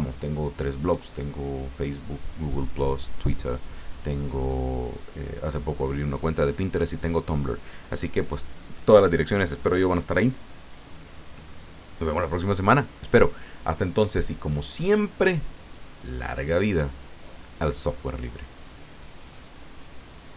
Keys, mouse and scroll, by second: 14.6 click, 19.2 click, 20.3 click.